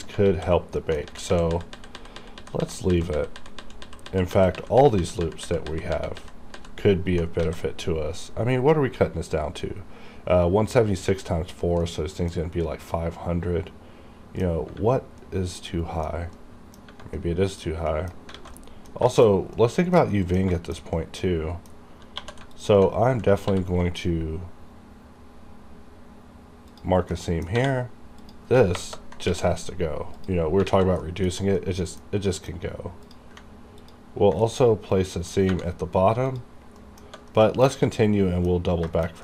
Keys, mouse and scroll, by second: 0.3 alt+a, 0.8 middle click, 0.9 middle click, 1.1 ctrl+z, 7.5 alt+a, 11.9 middle click, 12.4 scroll down 1, 13.0-14.8 middle drag, 15.3 middle click, 16.1 scroll down 1, 16.4 middle click, 17.2 middle click, 18.0 middle click, 18.2 scroll up 1, 18.4 alt+a, 18.6 middle click, 19.1 shift+middle click, 19.4 shift+scroll down 1, 19.6 middle click, 20.2 middle click, 20.5 scroll up 1, 20.6 shift+middle click, 21.0 middle click, 21.8-22.2 scroll up 1, 22.2 2, 22.6 alt+click, 22.6 alt+click, 23.4 ctrl+e, 26.7 ctrl+e, 26.8 click, 27.2 middle click, 27.2 middle click, 27.6 1, 28.3 click, 28.8 ctrl+KP_Add, 29.3 KP_Add, 30.2 click, 30.7 alt+a, 31.1 middle click, 31.4 scroll down 1, 31.6 middle click, 32.1 scroll up 1, 32.3 middle click, 33.1 click, 33.1 click, 33.9 ctrl+click, 34.5 ctrl+middle click, 36.4 click, 37.4 middle click, 37.8 alt+a, 37.9 scroll up 1, 38.0 middle click.